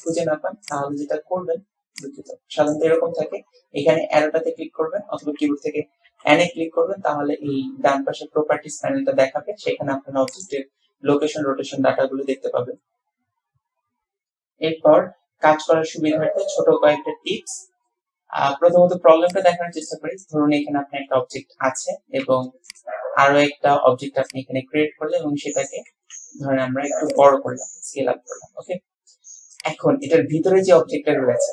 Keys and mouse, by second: 2.1 click, 6.2 n, 10.5 click, 19.3 click, 22.2 shift+d, 24.3-25.8 drag, 26.0 s, 27.5-28.8 drag, 29.6 click, 30.3-31.5 drag.